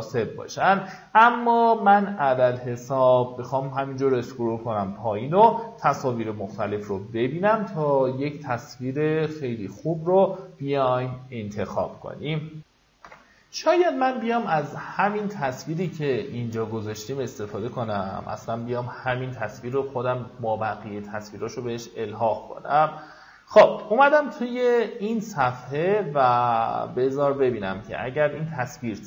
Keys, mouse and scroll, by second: 8.4-9.0 scroll up 1, 9.4-10.3 scroll down 1, 12.8 F9, 14.5 click, 15.5-16.6 middle drag, 20.0 click, 20.8 scroll down 1, 21.9 scroll up 1, 27.0 right click, 28.1 click.